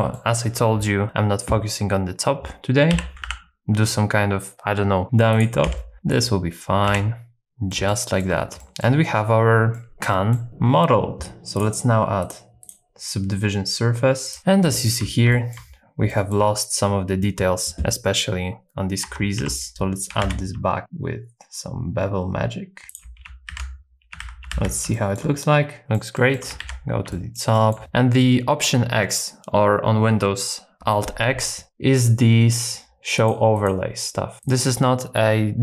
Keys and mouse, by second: 2.9 i, 3.2 e, 5.3 shift+click, 5.7 s, 6.1 click, 6.9 i, 7.5 Tab, 7.5 middle click, 7.9 shift+middle click, 8.6 shift+middle click, 9.8 middle click, 10.0 middle click, 11.5 click, 12.2 click, 12.6-14.4 drag, 14.4 KP_1, 14.6 shift+middle click, 15.3 shift+middle click, 16.1 shift+middle click, 19.0 Tab, 19.4 2, 20.2 ctrl+b, 23.5 alt+z, 24.2 alt+z, 24.5 alt+x, 24.9 shift+middle click, 25.8 shift+middle click, 26.1 shift+middle click, 26.6 alt+x, 27.1 shift+middle click, 27.5 shift+middle click, 33.1 click, 33.5 click, 34.4 click.